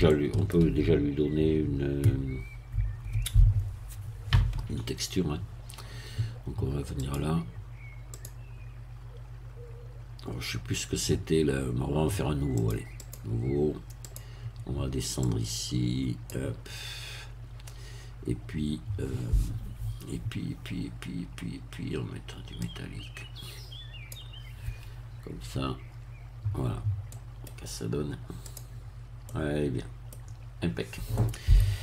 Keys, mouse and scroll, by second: 0.1 shift+middle click, 7.0 click, 8.1 click, 12.5 click, 13.0 click, 14.0 click, 15.2-16.4 drag, 22.6-24.3 drag, 27.1 middle click, 28.4 click, 29.2 middle click, 30.1-30.9 scroll down 1, 31.1 middle click.